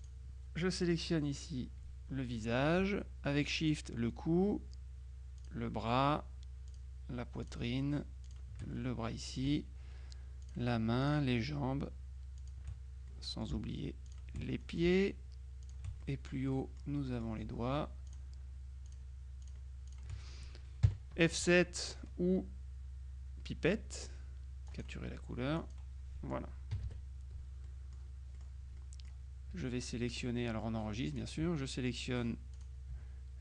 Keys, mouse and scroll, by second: 0.1 click, 2.4 middle click, 3.8 shift+click, 5.5 click, 6.8 click, 7.5 click, 8.3 click, 8.8 middle click, 10.5 shift+click, 11.2 click, 12.5 click, 13.1 middle click, 13.6 shift+click, 14.1 shift+click, 15.7 click, 16.6-17.8 drag, 18.1 shift+click, 20.9 KP_Subtract, 24.8 click, 25.7 click, 26.8 KP_Subtract, 27.7-29.0 drag, 29.6 F2, 30.0 click, 31.2 click, 32.6 click.